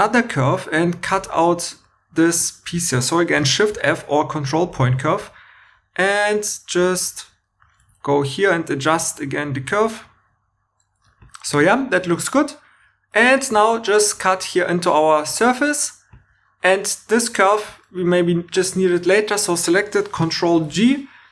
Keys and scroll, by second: 3.3 shift+f, 7.8 1, 11.0 2, 11.9 2, 13.5 c, 20.5 ctrl+g.